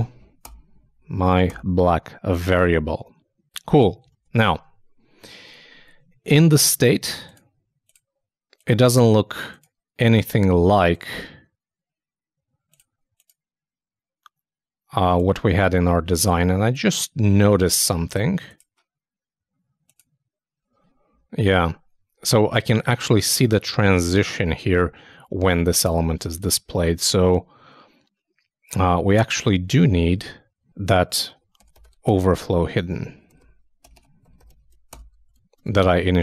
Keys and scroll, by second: 4.1 super+s, 4.4 super+Tab, 26.2 super+Tab, 35.3 super+Return, 35.3 super+s, 35.6 super+Tab.